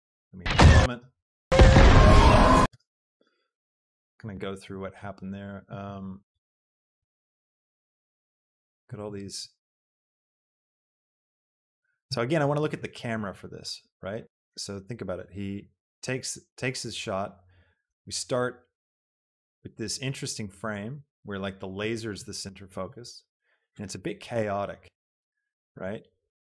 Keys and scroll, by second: 2.7 space.